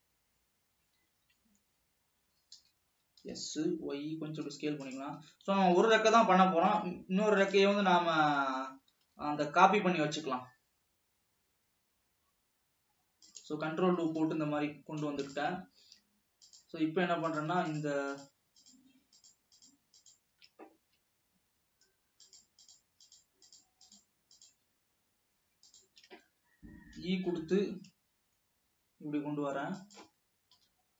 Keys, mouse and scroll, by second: 2.7 l, 3.6 s, 5.7 alt+a, 6.2 ctrl+r, 8.9 alt+a, 9.3 ctrl+r, 14.7 Escape, 15.5 click, 16.0 alt+a, 17.0 click, 17.9 shift+click, 18.3-18.8 shift+drag, 18.9-19.3 shift+drag, 19.4 shift+click, 19.8 shift+click, 20.3-20.9 shift+drag, 22.4 shift+click, 23.3 shift+click, 23.7 shift+click, 24.2 shift+click, 26.2 shift+click, 27.2 e, 30.7 KP_7.